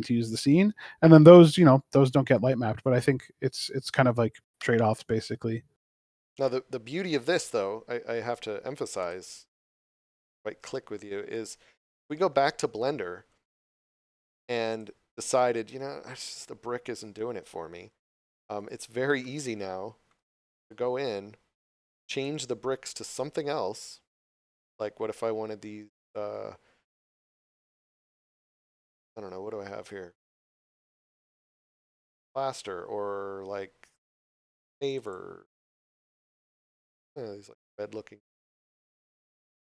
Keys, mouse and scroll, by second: 4.3 click, 9.0 click, 12.3 click, 18.6 right click, 19.3 shift+middle click, 20.4 scroll up 1, 22.1 click, 28.6 scroll down 1, 34.9 click.